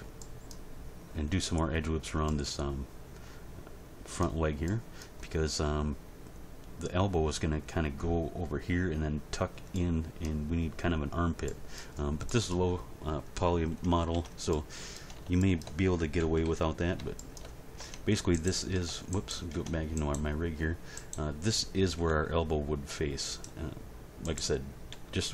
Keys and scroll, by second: 14.1 Tab, 16.2 End, 16.4 Page_Down, 17.8 Tab, 22.0 g, 24.9 g.